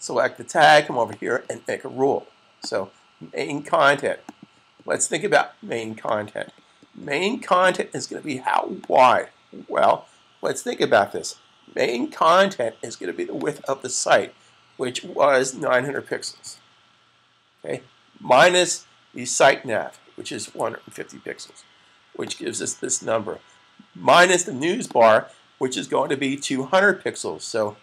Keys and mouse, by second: 0.9 click, 13.2 click, 15.7-16.2 typing, 19.7-21.1 typing, 22.0 click, 27.7-27.8 typing.